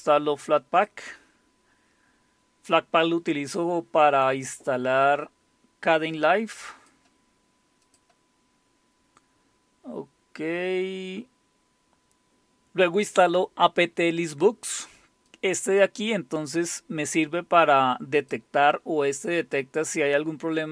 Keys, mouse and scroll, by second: 6.1-7.6 drag, 7.9 click, 8.5-9.9 scroll down 2, 9.9-10.8 scroll down 1, 15.3-20.5 drag.